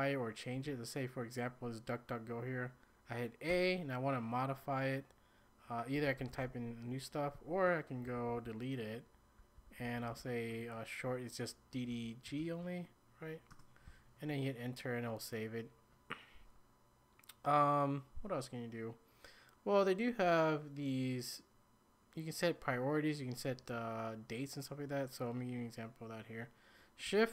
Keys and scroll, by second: 0.5 typing, 3.5 typing, 5.7-6.9 typing, 8.1 ctrl+h, 8.3 ctrl+h, 8.4 ctrl+h, 8.9 ctrl+h, 9.0 ctrl+h, 11.9-12.3 typing, 13.5 Return.